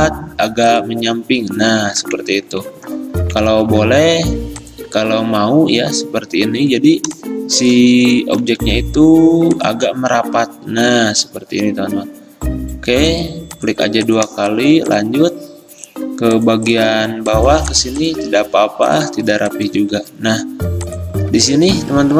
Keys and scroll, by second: 3.6 ctrl+z, 8.5 ctrl+z, 20.0 a.